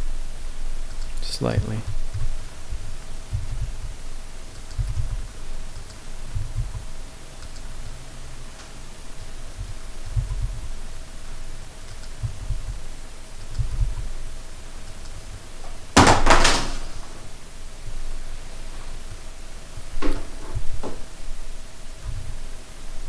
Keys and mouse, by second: 1.0 click, 2.1 KP_7, 3.3 s, 3.7 y, 4.6 click, 4.7 g, 5.0 y, 5.8 click, 6.2 s, 6.6 y, 7.5 click, 8.3-9.2 middle drag, 9.6-10.0 shift+drag, 10.2 g, 10.5 y, 12.0 click, 12.2 s, 12.5 y, 13.5 click, 13.6 g, 13.8 y, 15.0 click, 15.4 middle click, 16.2 middle click, 17.9-18.7 middle drag, 19.8-20.1 middle drag, 20.6 s, 22.1 x.